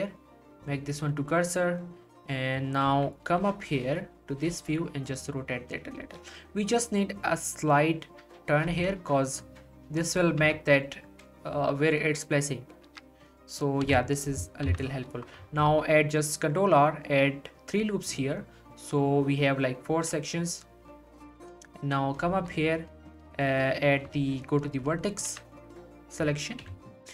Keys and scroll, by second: 2.9 3, 3.4 9, 4.5 r, 8.6 r, 10.4 Tab, 13.9 1, 14.7 z, 15.6 ctrl+r, 25.3 z, 26.6 1.